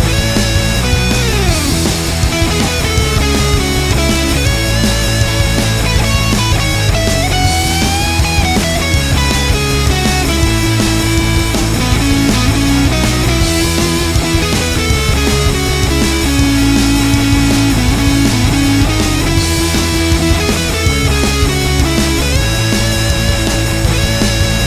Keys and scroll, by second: 3.2 Return, 13.5 End, 15.5 Tab, 16.4 Return.